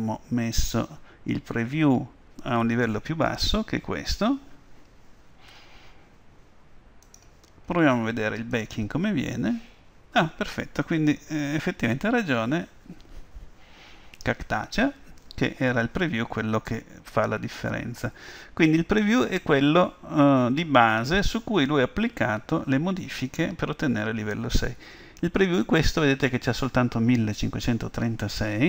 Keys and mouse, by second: 7.1-10.5 drag.